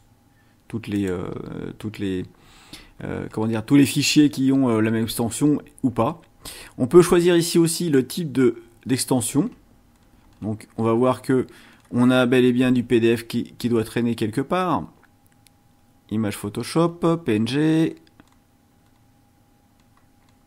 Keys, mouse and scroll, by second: 0.9 click, 7.9 click, 9.9-10.6 scroll down 2, 10.8-11.9 scroll down 3, 12.3-12.6 scroll down 2, 13.1-13.8 scroll down 4, 14.8-15.1 scroll down 2, 16.3-17.0 scroll down 4, 17.4-18.5 scroll down 6, 18.8 scroll down 2, 19.7-20.4 scroll down 6.